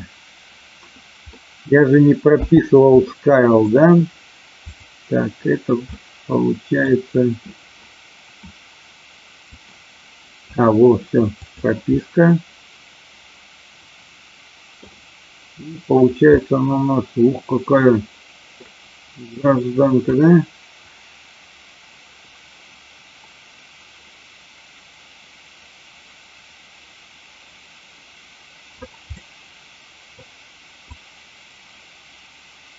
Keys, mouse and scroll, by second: 1.4 middle click, 2.3 n, 3.0 middle click, 5.9 middle click, 9.5-10.5 drag, 11.4 click, 11.9-14.8 middle drag, 16.3-18.6 middle drag, 20.0-28.9 drag, 29.2-30.2 middle drag, 30.9-32.7 drag.